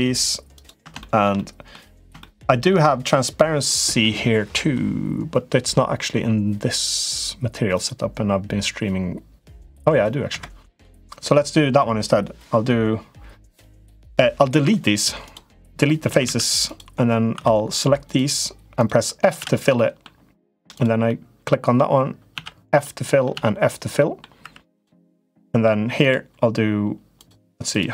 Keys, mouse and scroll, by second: 0.3 click, 0.8 middle click, 1.1 middle click, 1.9 shift+middle click, 7.6 click, 10.6 middle click, 11.4 right click, 14.3 Delete, 15.8 a, 16.0 a, 16.5 click, 17.2 2, 17.5 click, 17.8 shift+click, 18.6 shift+click, 19.0 f, 19.1 f, 19.5 middle click, 20.5 click, 20.8 middle click, 22.6 f, 22.6 middle click, 23.1 f, 23.7 middle click, 24.3 3, 24.5 click, 25.0 middle click.